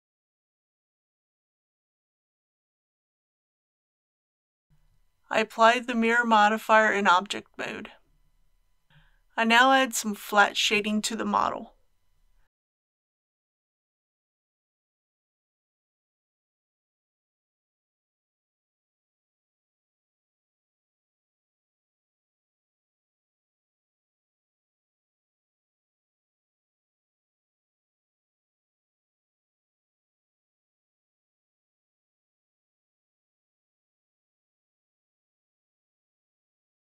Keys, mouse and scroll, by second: 5.1 Tab, 7.5 ctrl+a, 11.7 alt+a, 13.2 click, 15.6 Tab, 17.1 middle click, 18.7 KP_1, 19.9 shift+middle click, 21.0 scroll up 1, 32.2 ctrl+z, 34.1 i.